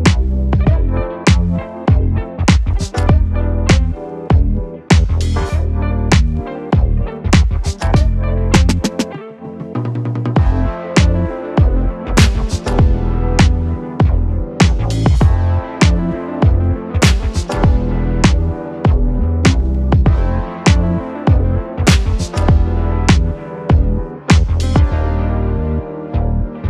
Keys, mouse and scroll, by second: 7.7 click, 11.0 space, 17.3 space, 17.7-24.4 drag, 25.9 ctrl+d.